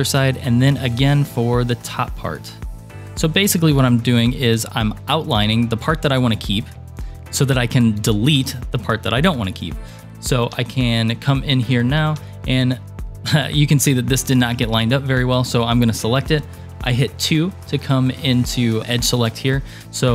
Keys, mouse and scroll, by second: 0.0 ctrl+r, 6.4 scroll up 1, 7.0-7.5 scroll up 3, 8.8-9.5 scroll up 3, 9.6 super+middle click, 10.7 shift+middle click, 11.5-12.2 scroll up 2, 12.2 2, 13.1 click.